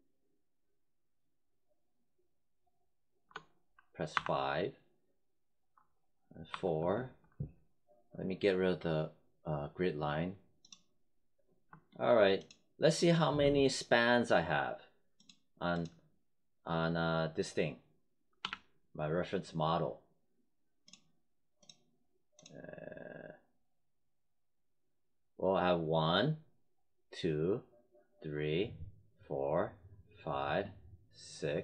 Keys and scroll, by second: 4.1 5, 6.4 4, 18.3 w.